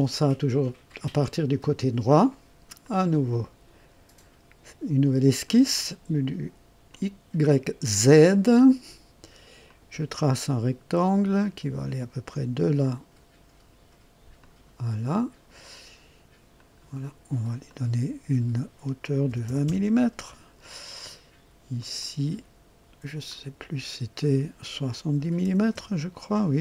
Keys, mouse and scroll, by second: 2.7 click, 5.4 click, 6.8 click, 9.6 click, 12.2 click, 14.3 click, 15.1 right click, 16.5 click, 17.6 click, 19.2 KP_2, 19.4 KP_0, 19.6 KP_Enter, 21.7 click, 23.2 click, 25.1 KP_7, 25.4 KP_0, 25.7 KP_Enter.